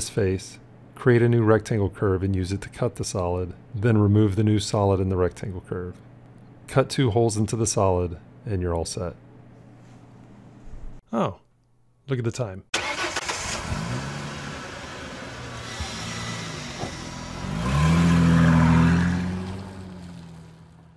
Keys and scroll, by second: 4.9 c, 9.0 c.